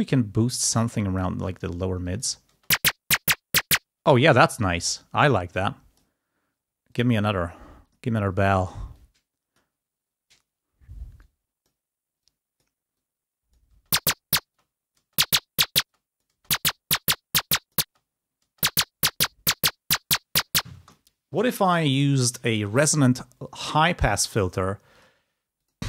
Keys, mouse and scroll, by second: 0.7 click, 1.4-2.0 scroll up 2, 2.0 click, 2.7 space, 3.8 space, 4.9 click, 5.6 click, 6.8 click, 7.9 click, 8.8 click, 9.7-10.8 scroll up 2, 10.8-11.1 scroll up 1, 11.1 click, 12.2-13.6 drag, 13.7 space, 14.4 click, 15.8 click, 17.4 click, 17.8 space, 17.9-18.2 scroll down 2, 21.0 space, 21.8 click, 24.1 click, 24.9 click, 25.6 click.